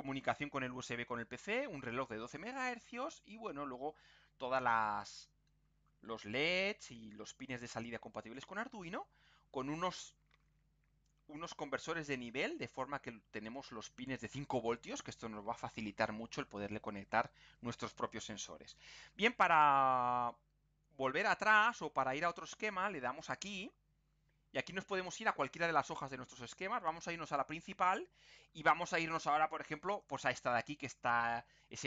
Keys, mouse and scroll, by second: 16.4 scroll down 2, 17.2 scroll down 2, 17.7-18.2 scroll up 2, 18.5-19.1 scroll down 4, 19.5-20.1 scroll up 4, 23.3 click, 24.6-25.0 scroll up 2, 27.2 click, 30.0 click.